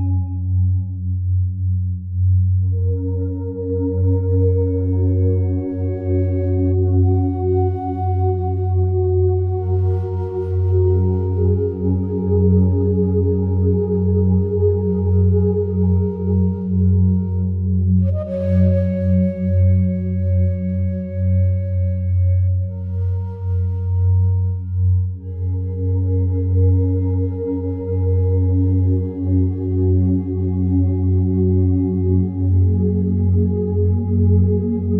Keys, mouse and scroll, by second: 0.4 click, 1.2 click, 2.6 click, 3.3-5.7 alt+drag, 9.5 shift+click, 12.4 m, 13.1 click, 14.4-16.9 typing, 18.8 typing, 20.8 click, 21.1 click, 23.7 click, 25.2 click, 26.7 click, 27.6 m, 28.5 click, 33.7 click, 34.3 click.